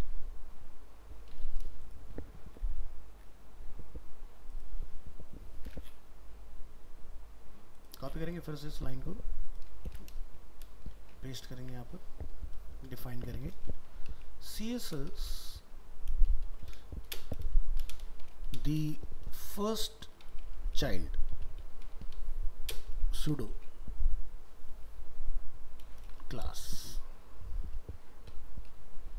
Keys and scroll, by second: 9.9 ctrl+c.